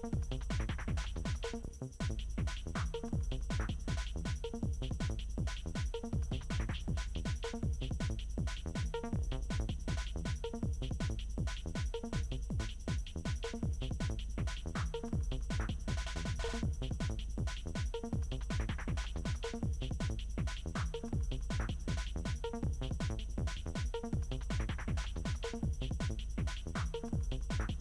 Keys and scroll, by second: 6.7 t.